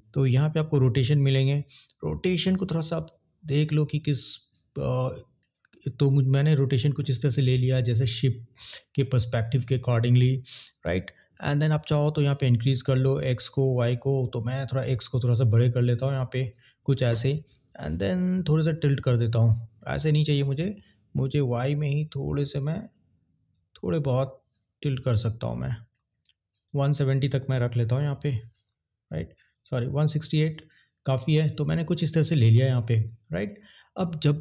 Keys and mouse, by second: 0.1 ctrl+z, 2.6-5.5 drag, 12.3-16.7 drag, 18.5-19.8 drag, 20.2 ctrl+z, 21.4-25.9 drag, 26.6-29.2 drag, 29.8 ctrl+z, 32.2 click.